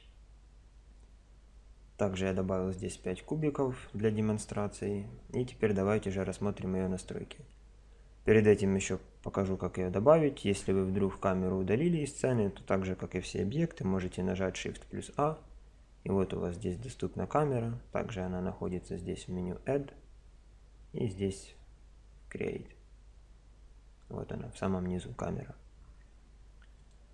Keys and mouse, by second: 0.0 Escape, 14.2 shift+a, 21.2-24.7 middle drag, 25.8 middle click, 26.8 click.